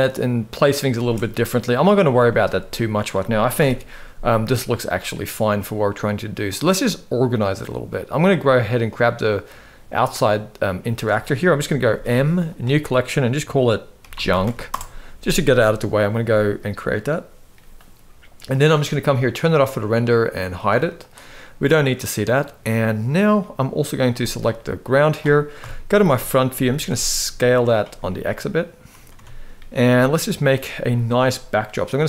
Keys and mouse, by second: 0.7 space, 0.9 middle click, 2.0 shift+middle click, 3.3 shift+Left, 4.1-4.5 middle drag, 5.5 middle click, 8.5 middle click, 9.9 middle click, 11.6 m, 19.1 click, 20.0 click, 20.7 click, 21.3-22.1 middle drag, 23.1 middle click, 24.2 middle click, 25.3 KP_1, 26.4 s, 27.8-28.8 middle drag, 28.8 Tab, 30.1 click.